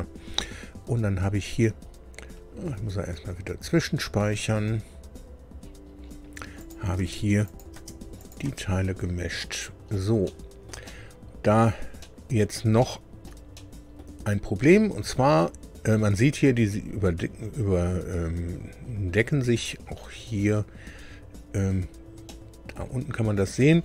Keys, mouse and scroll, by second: 1.1-1.4 scroll down 2, 5.5-6.2 scroll down 4, 6.5 click, 7.0 space, 7.4 click, 7.7 space, 8.2 click, 8.5 space, 9.4 click, 10.2 shift+middle click, 11.2 click, 12.0 middle click, 12.8 shift+middle click, 13.5 shift+middle click, 22.2 middle click.